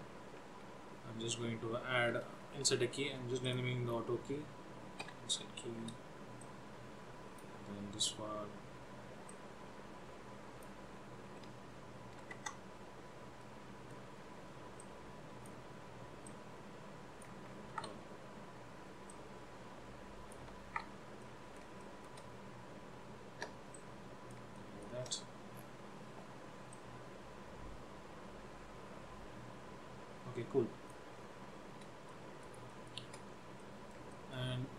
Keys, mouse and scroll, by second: 1.0 scroll up 2, 3.6 click, 3.9-4.4 scroll down 2, 5.3-7.0 typing, 6.5 click, 9.3 click, 11.4 r, 13.5 middle click, 14.2 scroll up 2, 15.0 click, 16.4 click, 18.1 ctrl+z, 19.2 click, 21.2 ctrl+z, 21.3 middle click, 22.0 shift+middle click, 22.4-23.8 scroll up 2, 23.8 click, 24.7 shift+middle click, 25.6-26.7 scroll down 4, 26.9 click, 31.3-31.6 scroll up 4, 32.1 middle click, 32.8 shift+middle click, 33.3-33.7 scroll up 2, 33.7 middle click, 34.2 shift+middle click.